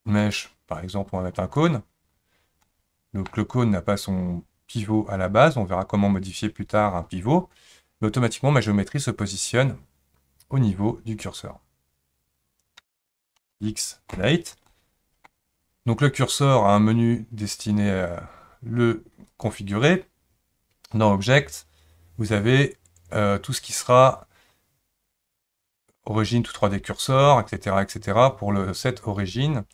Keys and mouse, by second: 2.6-3.3 middle drag, 13.4 x, 14.7-15.3 middle drag, 19.3-29.7 drag.